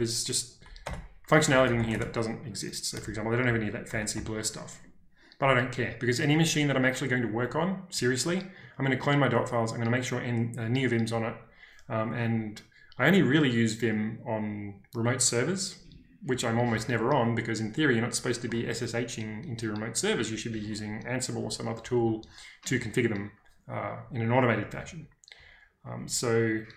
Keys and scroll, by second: 0.8 Return, 1.4-2.2 typing, 3.4 ctrl+k, 3.4 ctrl+j, 3.8 ctrl+k, 4.1 ctrl+j.